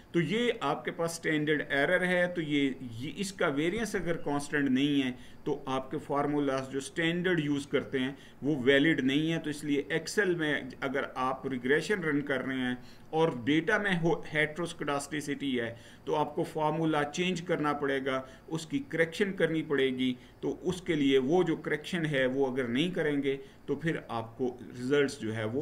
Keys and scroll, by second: 20.4 Right.